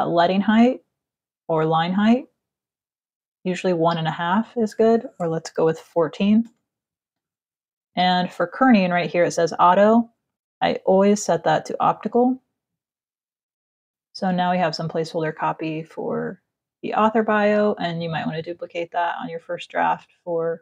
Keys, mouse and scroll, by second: 3.0 click, 5.2 KP_1, 6.2 Return, 9.6 click, 10.7 click, 11.2 click, 14.0 click, 14.3 click, 16.6 space, 16.9 click, 17.7 alt+click.